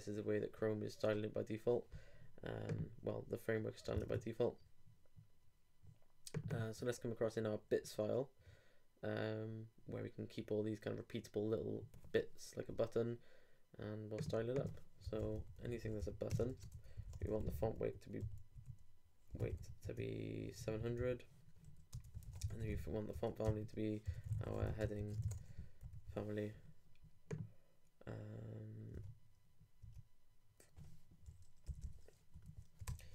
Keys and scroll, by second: 4.0 super+Tab, 16.4 shift+space, 16.5 shift+[, 16.7 shift+Return, 23.4 shift+Return, 23.5-25.7 typing, 32.6 super+Up, 32.9 super+Return.